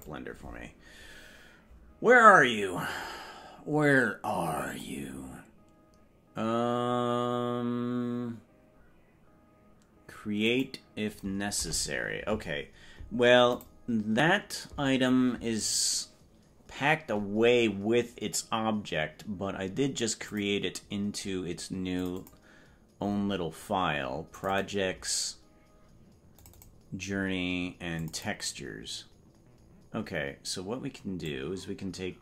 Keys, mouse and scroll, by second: 4.7-10.6 drag.